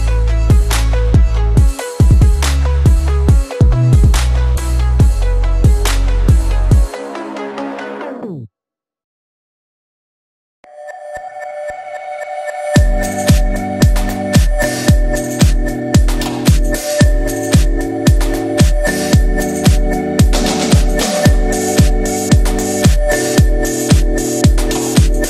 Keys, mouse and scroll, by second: 0.9 click, 3.8 click, 6.7 click, 11.7 right click, 11.8 right click, 12.7 click, 14.5-15.1 alt+click, 24.4 Down.